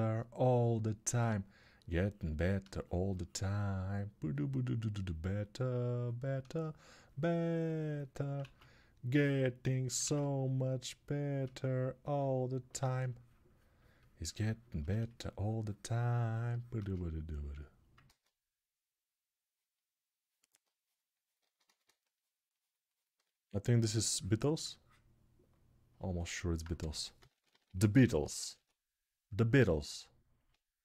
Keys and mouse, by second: 8.2 ctrl+z, 9.8 ctrl+z, 12.0-21.4 alt+shift+drag, 17.8 ctrl+z, 21.2 ctrl+z, 21.4 ctrl+z, 26.6-28.3 typing.